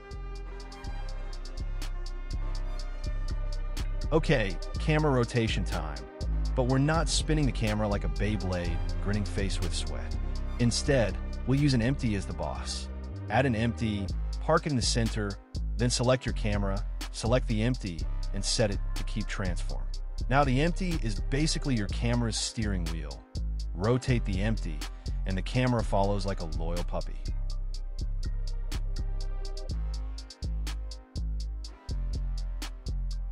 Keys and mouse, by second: 0.1 space, 0.5 drag, 1.1 space, 2.0 space, 2.4-3.2 drag, 3.5 click, 3.9 middle click, 4.1 shift+click, 4.2 shift+a, 6.7 s, 8.3 KP_0, 9.8 g, 10.0 z, 11.8 g, 12.0 x, 13.5-13.9 drag, 14.6 g, 14.7 y, 15.9 s, 17.2 KP_0, 18.8 F2, 22.2 drag, 23.4 click, 25.2 shift+click, 25.9 ctrl+p, 27.8-28.3 middle drag, 28.9 click, 29.5 click, 31.1 click, 32.5 g.